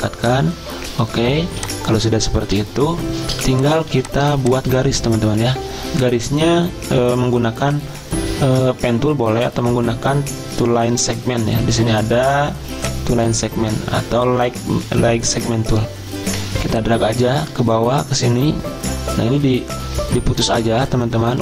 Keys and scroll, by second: 1.5 z, 3.1-3.8 typing, 7.5-8.2 typing, 20.3 z.